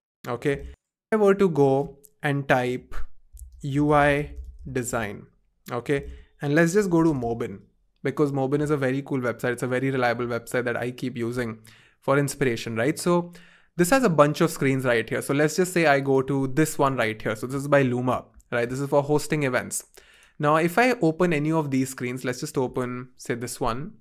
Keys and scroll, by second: 7.9 Return, 7.9 typing, 9.6 typing, 14.1 typing, 23.0 typing.